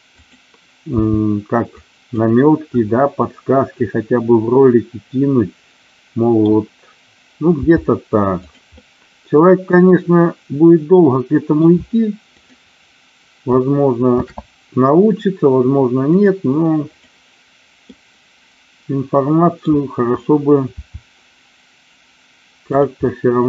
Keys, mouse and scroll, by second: 0.1 click, 1.0 g, 1.8 click, 2.7-6.3 middle drag, 7.5 g, 8.4 click, 8.7-11.6 middle drag, 12.3 click, 14.1 shift+d, 16.1 click, 17.9-19.6 middle drag, 20.7 e, 22.6 click, 23.3-23.4 middle drag.